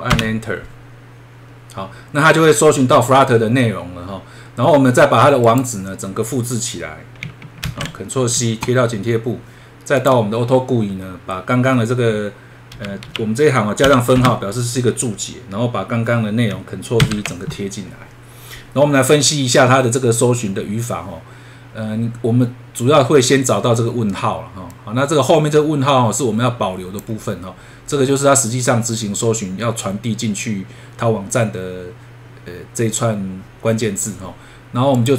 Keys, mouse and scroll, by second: 0.1 Return, 5.4 click, 7.6 ctrl+c, 10.0 click.